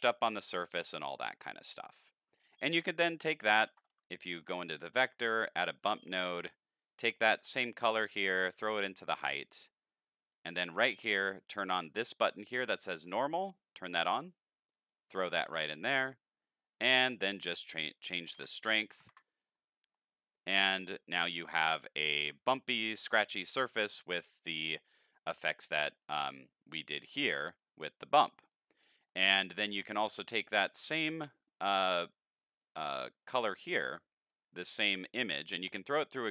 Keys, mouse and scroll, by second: 3.1 middle click, 3.8 shift+a, 4.4 click, 5.1 click, 5.8 click, 6.9 click, 7.0 click, 7.7-9.1 drag, 9.9-10.3 drag, 10.6 middle click, 13.0 click, 14.9-15.6 drag, 16.7 click, 27.6 click, 28.8 middle click, 29.7 click, 30.8 middle click, 31.4-32.0 drag, 32.6-33.2 drag, 33.7-34.3 drag, 34.6 middle click, 35.0-36.3 drag.